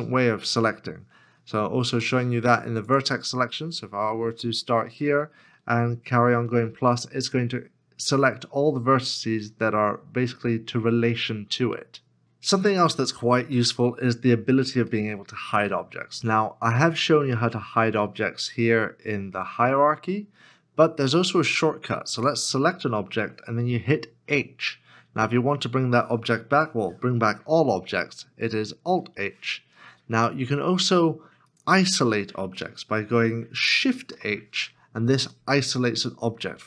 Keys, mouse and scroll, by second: 1.9 1, 5.7 ctrl+KP_Add, 14.9 middle click, 15.7 shift+middle click, 21.0 shift+middle click, 24.2 h, 28.9 alt+h, 35.3 shift+h, 35.3 middle click.